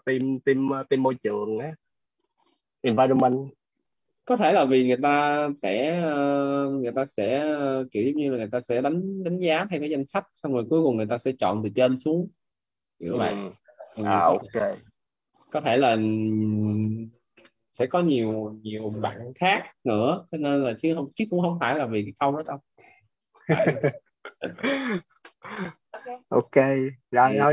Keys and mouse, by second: 0.3 click, 24.4 click.